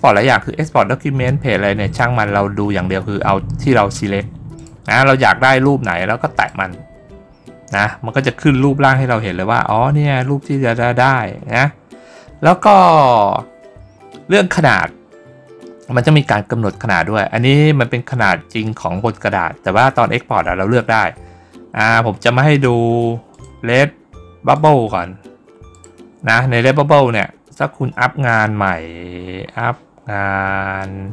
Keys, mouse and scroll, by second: 4.4 click, 6.2 click, 23.2 click, 24.4 click, 25.6 click.